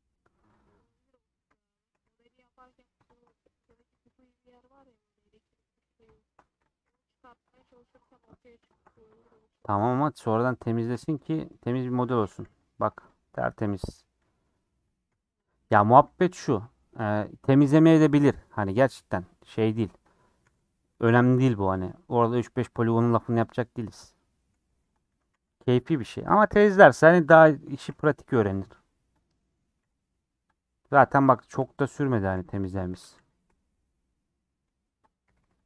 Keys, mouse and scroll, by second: 0.5 click, 1.0 middle click, 1.8 shift+click, 2.0 g, 3.0 shift+click, 3.3 middle click, 3.6 g, 4.3 middle click, 5.2 click, 5.6 click, 6.7 click, 6.8 g, 7.5 middle click, 8.0 scroll up 1, 8.1 click, 8.9 g, 9.6 middle click, 10.7 shift+click, 11.0 g, 11.9 scroll down 4, 12.2-15.9 typing, 13.1 click, 14.0 click, 14.9 click, 15.7 click, 16.4-18.7 middle drag, 18.7 scroll up 2, 18.9-19.5 scroll down 1, 19.5 middle click, 20.1 click, 20.4 g, 21.1-24.1 middle drag, 24.1 click, 24.5 g, 25.0 a, 25.3 m, 25.8 scroll down 1, 25.9-27.2 middle drag, 27.2 scroll up 1, 27.3 scroll down 3, 28.0 shift+middle click, 28.5 scroll up 3, 28.7 2, 29.1 click, 29.3 middle click, 29.8 g, 31.1 click, 31.3 shift+middle click, 32.0 click, 32.3 g, 32.9 a, 33.1 m, 33.5-35.1 middle drag, 35.1 click, 35.2 g.